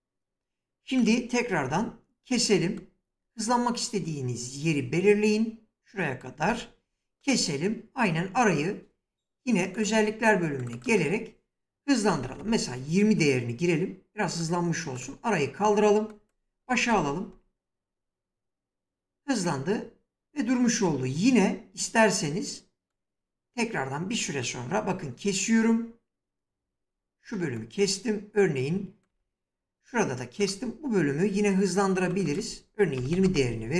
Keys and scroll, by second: 1.3 s, 6.1 s, 11.4-12.3 typing, 16.5 space, 20.3 space, 24.3 s, 28.7 s, 32.3-33.3 typing.